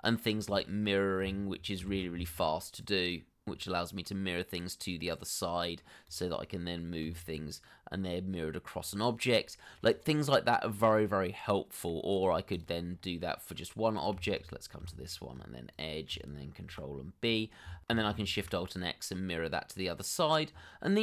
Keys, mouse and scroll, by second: 0.9 double click, 1.5 middle click, 2.2 shift+click, 2.5 shift+middle click, 4.5 alt+shift+x, 5.7 middle click, 9.3 g, 11.1 middle click, 11.7 scroll up 1, 12.1 middle click, 13.3 double click, 13.7 scroll up 1, 14.0 middle click, 15.0 shift+middle click, 15.2 middle click, 15.5 Tab, 17.4 ctrl+b, 17.8 Tab, 19.0 alt+shift+x, 20.2 middle click.